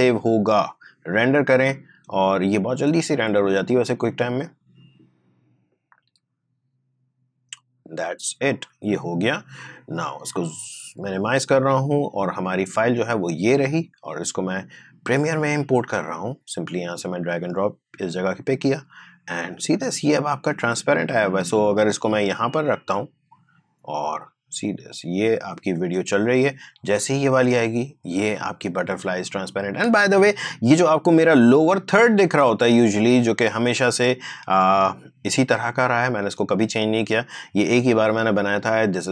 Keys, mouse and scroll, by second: 1.2 click, 9.6 click, 13.2-25.8 drag, 25.8 space, 29.8 space, 32.2-35.5 drag.